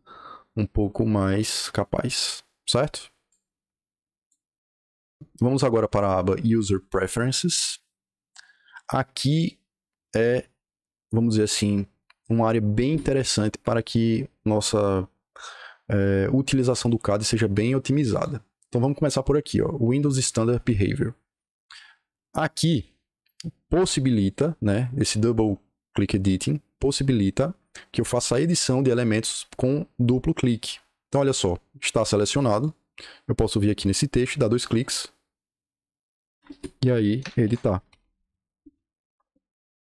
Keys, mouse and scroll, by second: 3.2 click, 6.8 click, 15.4-18.1 drag, 32.4 click, 34.6 click, 34.7 click, 37.1-39.8 typing.